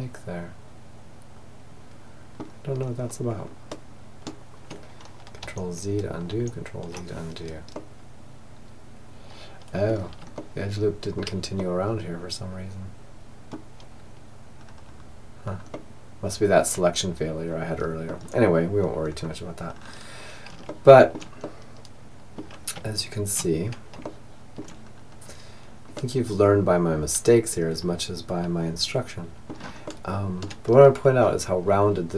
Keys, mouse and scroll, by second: 1.8-4.7 middle drag, 4.4 ctrl+z, 5.4 ctrl+z, 6.8-8.8 middle drag, 9.4-12.4 middle drag, 13.6-16.6 middle drag, 17.9-22.4 middle drag, 21.9 Tab, 23.1-24.6 middle drag, 25.7-26.9 middle drag, 28.6-30.7 middle drag, 31.5-32.1 middle drag.